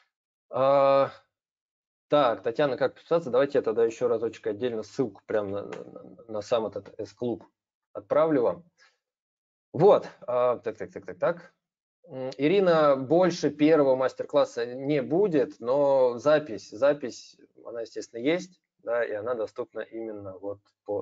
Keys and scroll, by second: 3.8 ctrl+c, 5.1 ctrl+v.